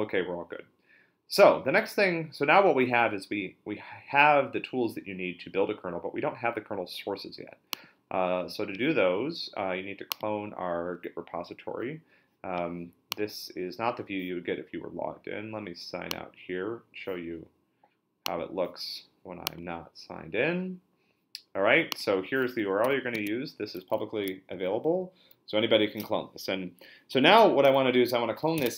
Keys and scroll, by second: 22.8 super+c, 23.1 super+Tab, 28.3-28.7 typing.